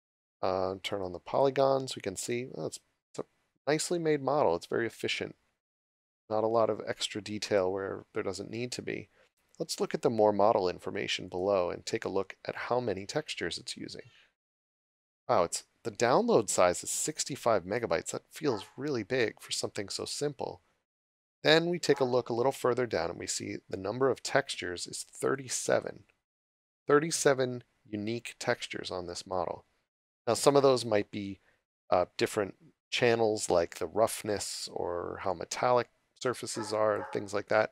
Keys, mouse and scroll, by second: 1.3 click, 9.4-10.0 scroll down 1, 11.3 click, 14.3-14.6 scroll down 1, 16.9 click, 25.3 click, 32.0-33.7 scroll up 1, 33.7 click, 37.6 scroll up 1.